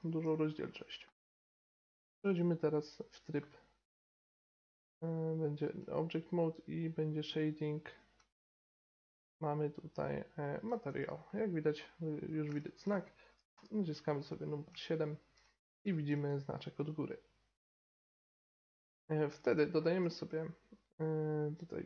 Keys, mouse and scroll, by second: 1.6-5.9 middle drag, 4.0 Tab, 8.1 z, 11.3-13.5 middle drag, 13.5 KP_7, 14.4-15.3 middle drag, 19.3 shift+a.